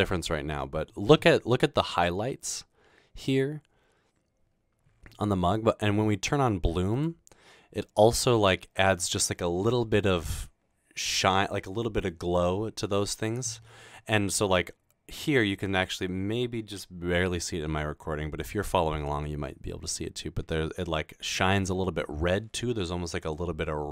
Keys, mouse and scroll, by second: 7.0 click.